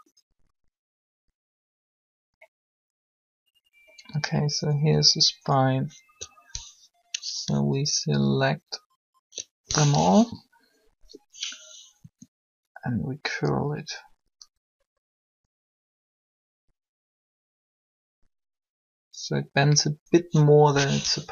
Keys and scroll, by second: 9.8 shift+7, 12.0 r.